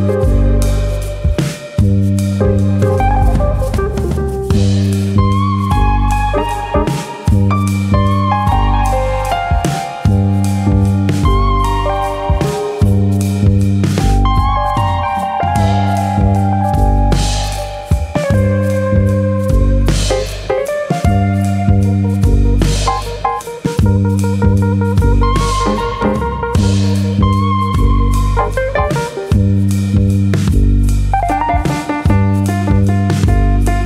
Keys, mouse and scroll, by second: 0.3 click, 1.3 ctrl+z, 1.4 middle click, 1.7 Tab, 2.1 middle click, 3.0 1, 3.2 middle click, 3.8 click, 4.1 middle click, 4.4 shift+middle click, 4.6 middle click, 5.5 alt+click, 5.9 middle click, 6.3 click, 7.1 g, 7.8 click, 8.3 click, 8.4 g, 9.0 click, 9.2 middle click, 9.8 shift+middle click, 10.1 middle click, 10.8 click, 11.0 middle click, 11.6 click, 12.5 middle click, 12.9 middle click, 13.3 click, 13.6 middle click, 14.1 click, 14.9 middle click, 15.4 click, 15.6 middle click, 16.0 click, 16.7 middle click, 17.3 click, 17.6 middle click, 18.3 click, 19.3 click, 19.5 middle click, 20.5 ctrl+click, 21.1 ctrl+click, 21.9 middle click, 22.5 Tab, 22.8 middle click, 23.9-24.3 scroll up 3, 24.0 Tab, 24.3 shift+middle click, 24.6 middle click, 25.3 click, 26.2 g, 26.9 click, 27.2 click, 27.4 g, 28.1 click, 28.3 middle click, 28.7 click, 29.1 g, 30.2 click, 30.7 click, 31.0 g, 31.6 click, 31.8 middle click, 32.3 middle click, 32.7 g.